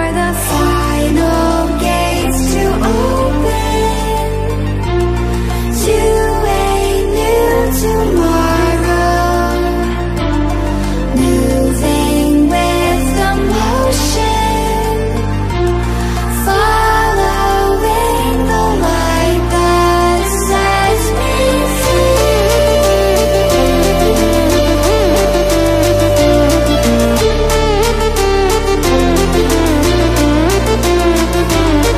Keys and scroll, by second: 4.1 alt+7, 4.8 Escape, 5.4 alt+a, 7.4 alt+a, 29.0 Return.